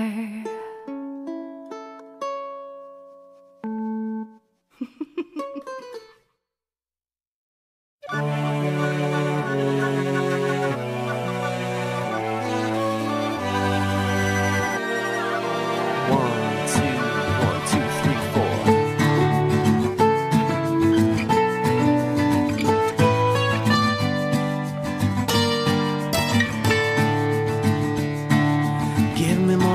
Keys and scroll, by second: 2.8 ctrl+z, 3.4 ctrl+z, 4.0 ctrl+z, 7.2 ctrl+z, 22.4 ctrl+z, 26.9 ctrl+z.